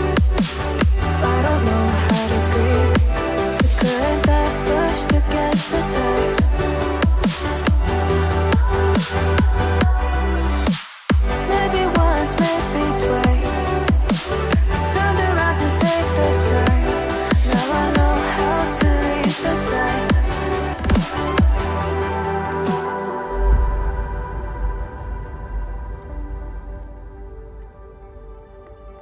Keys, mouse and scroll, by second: 1.9 double click, 2.7 ctrl+click, 5.0 double click, 10.4 right click, 13.3 double click, 27.6 ctrl+shift+click.